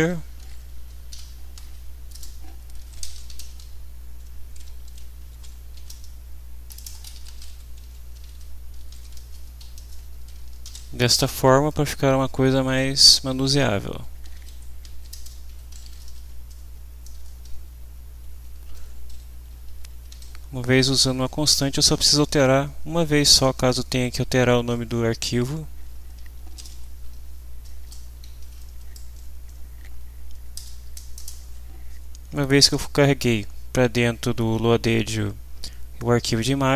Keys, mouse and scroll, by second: 1.1 shift+Home, 2.1 shift+Return, 2.5-3.8 typing, 5.5-9.7 typing, 10.6 ctrl+shift+v, 12.1 Down, 13.3 Left, 14.3 shift+End, 14.5 shift+Left, 15.5 Delete, 15.6-16.5 typing, 17.1 Return, 17.5 Down, 19.1 Right, 20.2 shift+Left, 26.2-27.5 typing, 27.8 Return, 28.2 End, 30.5 Return.